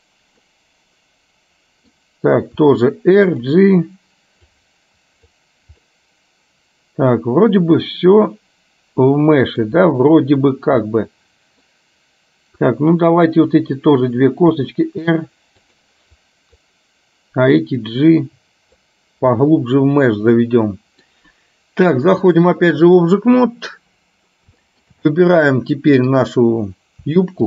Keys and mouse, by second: 0.6-2.0 middle drag, 2.6 r, 4.7 click, 6.0-9.7 middle drag, 11.0 middle click, 12.8 click, 14.6 r, 16.2 click, 17.7-19.0 drag, 19.5-21.2 middle drag, 22.2-23.2 drag, 24.7 shift+middle click, 26.2 click.